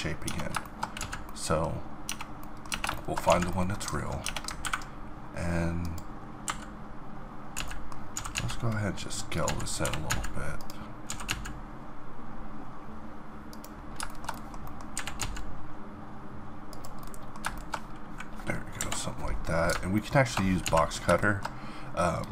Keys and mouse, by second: 0.2 Tab, 1.0 z, 2.0 middle click, 2.0 Tab, 2.7 Tab, 3.3 z, 4.2 Tab, 7.6 z, 8.1 s, 9.4 z, 9.8 g, 10.8 click, 11.1 s, 12.1-14.6 middle drag, 14.9 g, 18.8 KP_7, 20.6 z.